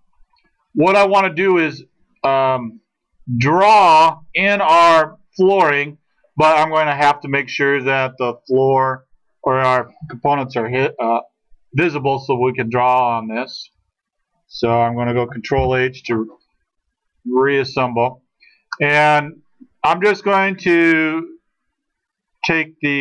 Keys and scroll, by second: 15.7 ctrl+h.